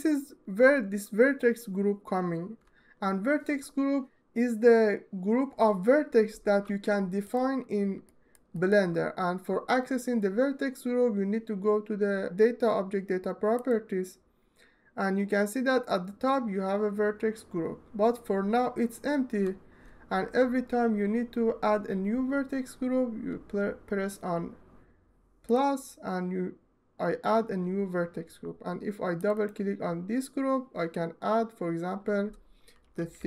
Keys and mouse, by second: 7.1 click, 8.0 alt+shift+middle click, 25.2 click, 28.9 click, 29.2-32.6 drag, 32.7-33.2 drag.